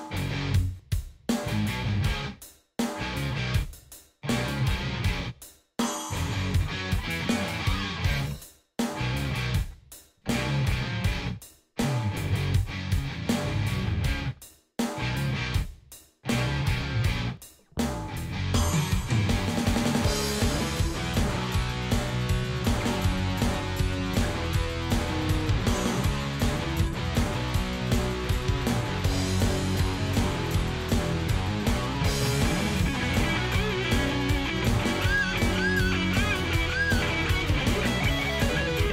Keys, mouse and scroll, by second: 1.6 click, 3.6-4.5 drag, 5.6 click, 7.0 -, 9.8 click, 10.7-12.3 drag, 12.8 ctrl+click, 13.7-14.8 drag, 15.0 click, 15.6 ctrl+s, 17.4 shift+\, 19.0 ctrl+click, 20.5 click, 21.0 click, 21.6 ctrl+s, 23.7 click, 28.3-30.8 drag, 32.0 click, 34.3 click, 37.2 click.